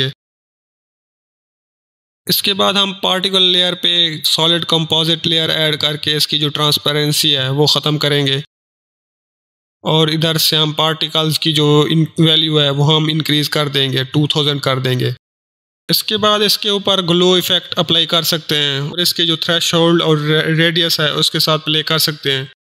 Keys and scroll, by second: 2.2 ctrl+space, 2.4 ctrl+s, 2.7 ctrl+o, 2.8 ctrl+l, 3.0 ctrl+i, 3.9 Return, 12.3-13.3 typing, 13.7 Return, 16.8-17.7 typing.